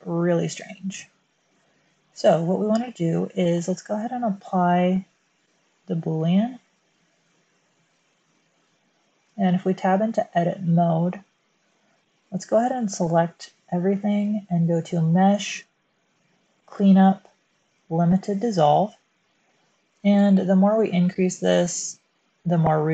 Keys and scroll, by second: 0.3 space, 9.2 Tab, 12.4 a.